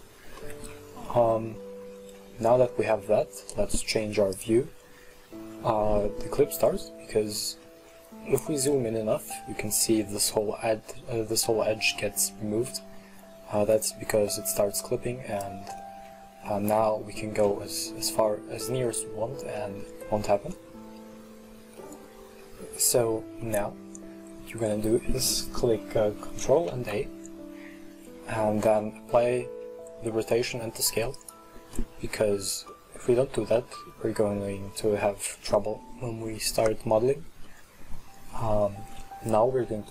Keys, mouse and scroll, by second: 2.0-2.5 scroll up 2, 2.5 scroll down 1, 2.8 middle click, 3.1 scroll up 1, 4.4 click, 6.9 scroll up 2, 7.5 middle click, 7.9-8.9 scroll up 2, 8.9-11.9 middle drag, 12.0-12.7 scroll down 2, 12.7-14.9 middle drag, 14.9-15.9 drag, 15.9 middle click, 16.1-16.8 scroll up 2, 16.8-17.3 scroll up 2, 17.3-19.0 middle drag, 19.0-19.6 scroll down 2, 19.6-20.1 middle drag, 20.1-20.6 scroll down 2, 20.6 middle click, 21.1-21.9 scroll down 3, 21.9-22.6 middle drag, 22.6-23.5 scroll up 1, 23.5-26.7 middle drag, 26.7 ctrl+a, 31.8-32.3 middle drag, 32.3-32.8 scroll up 2, 32.8-36.7 middle drag, 37.5-39.9 middle drag.